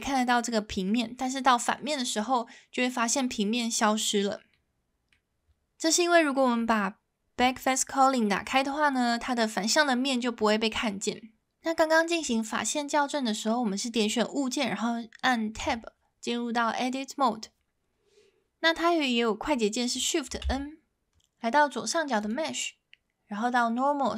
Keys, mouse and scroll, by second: 0.9-1.8 middle drag, 4.5-5.1 middle drag, 5.9-6.3 middle drag, 8.5-8.8 middle drag, 15.6 Tab, 20.4 shift+n, 22.3-24.1 drag.